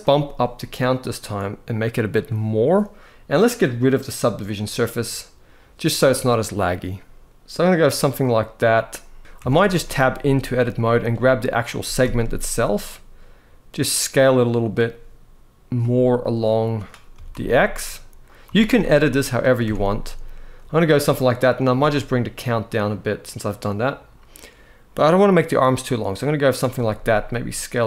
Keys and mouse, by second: 0.8-1.8 drag, 4.2 click, 9.2 Tab, 9.5 shift+middle click, 9.9 z, 10.9 click, 11.5 s, 11.7 x, 15.9 click, 16.8 s, 17.0 x, 17.9 click, 18.1 z, 19.3 Tab, 21.3-26.1 shift+drag, 26.6 s.